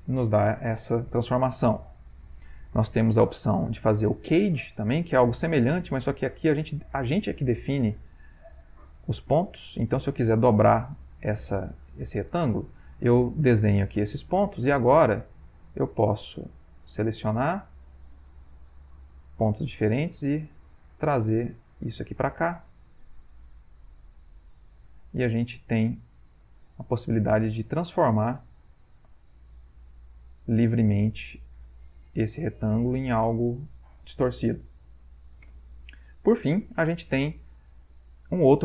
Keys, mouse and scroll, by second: 0.6 ctrl+z, 2.6 click, 6.4 click, 7.8 click, 8.6 click, 9.2 click, 9.9 click, 10.6 click, 11.5 click, 12.4 click, 15.5 click, 16.7 shift+click, 18.2-19.3 shift+drag, 19.8-20.9 drag, 21.7 click, 23.3 click, 24.7 click, 26.0 click, 27.6-28.8 drag, 29.3-30.9 drag, 31.7-32.8 drag, 33.3-34.3 drag, 35.5 Return, 36.6 ctrl+z, 38.2 click.